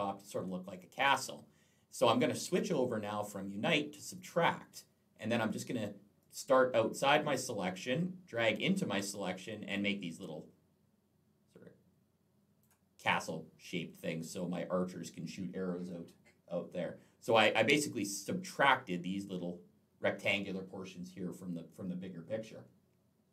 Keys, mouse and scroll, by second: 4.0 click, 6.0 click, 9.6 click.